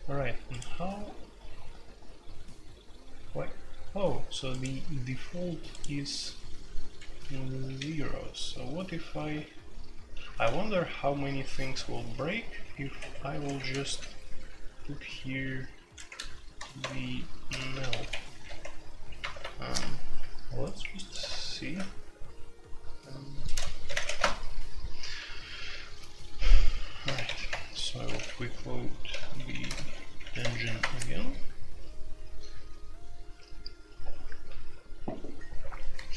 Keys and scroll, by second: 6.9 Escape, 7.6 l, 10.2 ctrl+v, 10.5-11.1 typing, 12.1-14.7 typing, 12.9 Escape, 16.0 ctrl+g, 16.8-18.0 typing, 18.0 Escape, 18.4 F2, 19.3 alt+2, 21.6 shift+c, 23.5-24.3 typing, 27.1-30.8 typing, 27.5 Return.